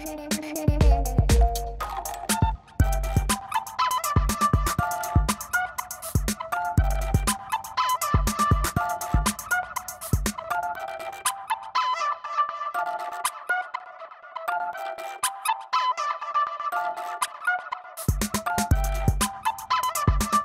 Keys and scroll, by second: 6.0 ], 19.0 space.